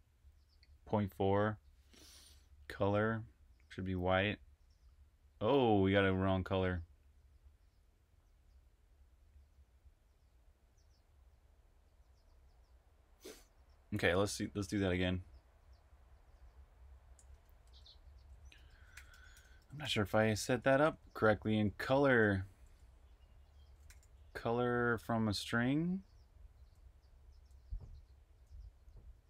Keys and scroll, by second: 17.2 super+Tab, 18.2 super+Tab, 18.6-22.1 typing, 23.5-24.3 typing, 26.0-29.2 typing.